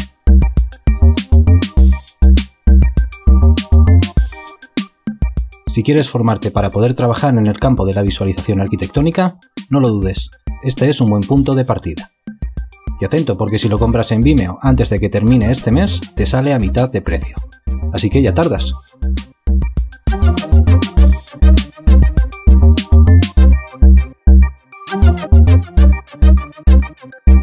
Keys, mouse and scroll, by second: 2.3 alt+shift+click, 2.9 F8, 5.7 alt+shift+click, 5.8 ctrl+alt+click, 6.1 space, 7.6 space, 8.0 F8, 8.8 alt+click, 11.8 alt+click.